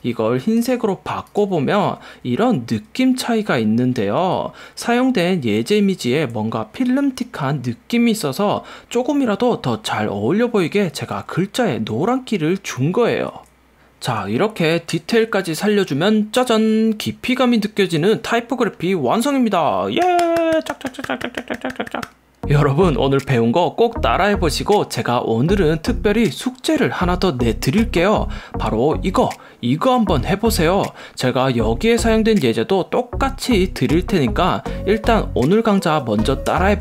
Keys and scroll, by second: 2.8 alt+super+z, 3.6 alt+super+z, 4.4 alt+super+z, 5.0 alt+super+z, 6.0 alt+super+z, 11.5 alt+super+z, 12.1 alt+super+z, 12.8 alt+super+z, 13.4 alt+super+z, 15.0 super+-, 16.5 super+=, 36.6 Up.